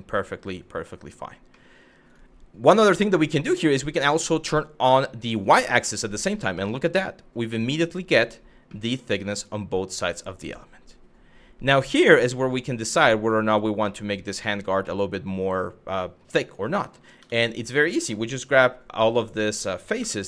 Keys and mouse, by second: 1.1 middle drag, 5.0 click, 5.6 middle click, 5.8 click, 6.2-7.9 middle drag, 8.4-12.0 middle drag, 12.6 middle drag, 13.5-14.1 middle drag, 14.5-15.7 middle drag, 16.1 click, 16.8 Tab, 18.9 middle click, 19.6 3.